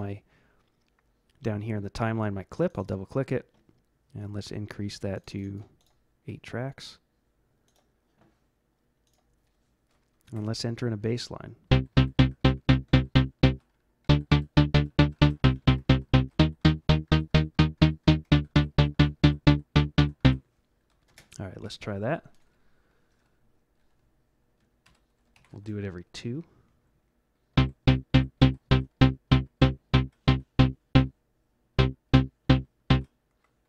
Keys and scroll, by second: 10.2 Left, 11.6-21.2 typing, 24.8 ctrl+-, 25.3 ctrl+=, 27.5-32.8 typing.